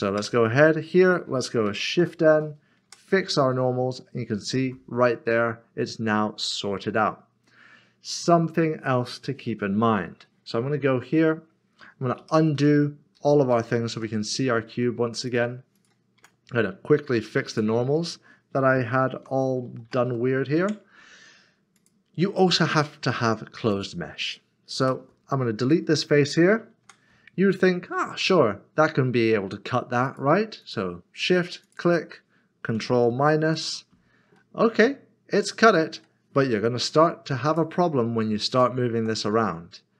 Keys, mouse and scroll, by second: 0.2 Tab, 2.0 n, 2.9 Tab, 3.4 n, 3.5 middle click, 12.2 ctrl+z, 14.9 ctrl+z, 15.3 click, 17.2 q, 19.8 typing, 20.6 Tab, 21.1 typing, 23.2 Tab, 23.7 click, 24.8 typing, 25.6 click, 26.8 Tab, 30.0 click, 31.6 shift+click, 34.4 middle click, 37.4 click, 38.9 g.